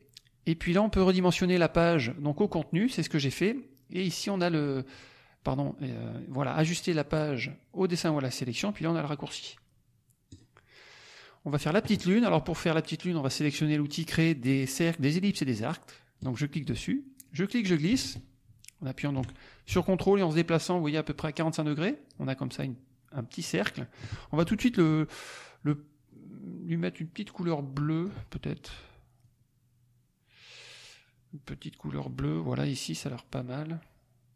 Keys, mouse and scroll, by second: 0.9 click, 10.2 click, 16.1 click, 17.2-24.1 drag, 27.3-28.2 drag, 29.2-32.1 drag, 33.0 click.